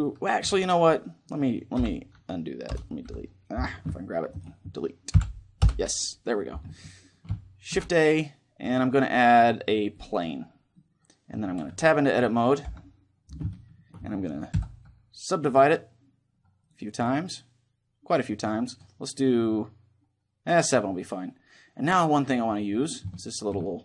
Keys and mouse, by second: 1.5 End, 1.5 Delete, 2.4 Return, 2.8 Delete, 4.1-6.5 right drag, 4.9 Delete, 10.5-12.3 middle drag, 11.4 Tab, 12.3 KP_7, 13.2-15.1 middle drag, 14.3 w, 16.3-20.7 drag, 21.6-23.8 middle drag.